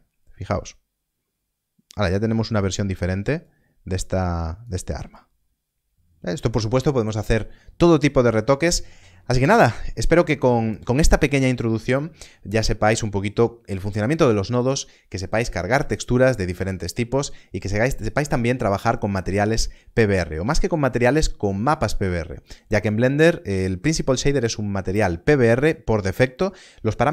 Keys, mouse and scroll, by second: 3.3 shift+click, 5.0 shift+click.